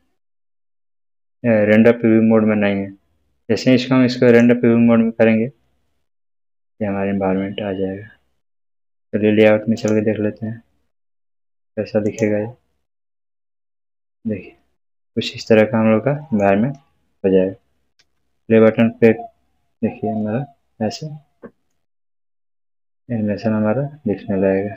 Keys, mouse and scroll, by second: 4.2 click, 7.6 Num_Lock, 7.6-9.7 scroll up 1, 9.7 click, 9.9 click, 12.0 click, 14.0-16.5 middle drag, 17.9 space, 20.1-21.7 middle drag.